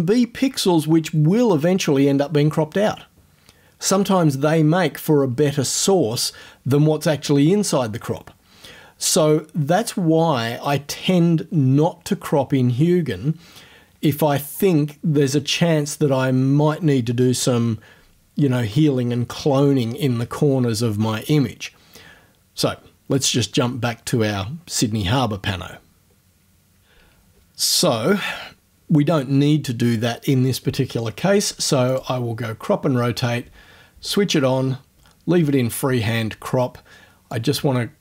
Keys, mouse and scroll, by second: 31.9 click, 34.1 click, 37.3-38.0 drag.